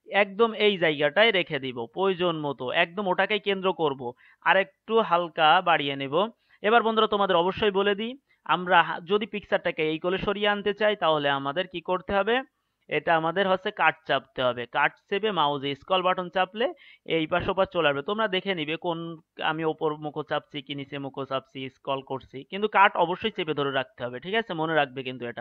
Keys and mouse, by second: 2.7-19.5 middle drag.